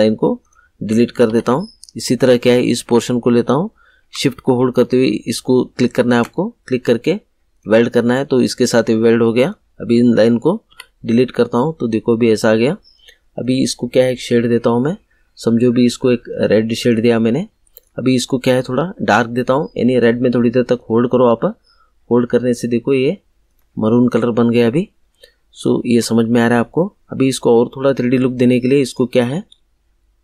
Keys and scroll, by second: 1.2 Delete, 10.6 Delete.